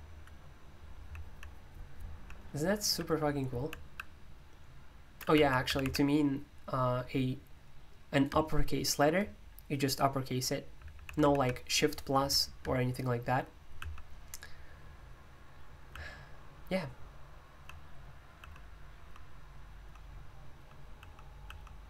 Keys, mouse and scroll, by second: 0.0-2.3 typing, 3.5 typing, 5.3-5.8 typing, 10.7-12.0 typing, 13.7 typing, 15.9 typing, 17.5-21.8 typing.